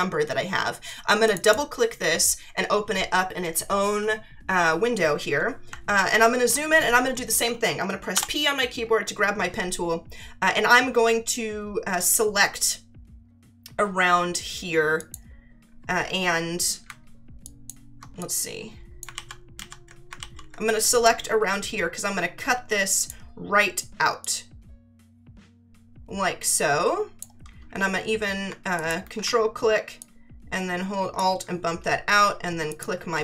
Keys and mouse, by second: 1.2 click, 5.8 ctrl+=, 8.1 p, 12.0 click, 15.0 click, 17.4 alt+click, 19.1 ctrl+z, 20.2 ctrl+z, 21.0 click, 24.2 click, 28.7 ctrl+click, 30.0 click, 32.7 click.